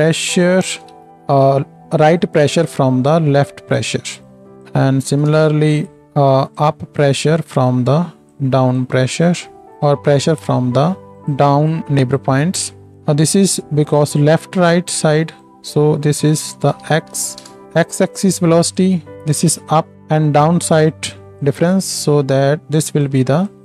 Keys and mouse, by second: 5.1 ctrl+shift+d, 5.8 right drag, 11.2-11.8 right drag, 14.0-15.5 right drag, 18.8 click.